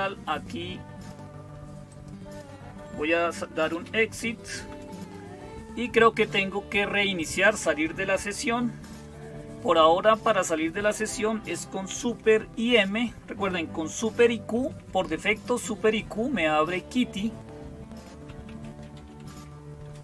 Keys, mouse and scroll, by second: 0.0-20.0 typing.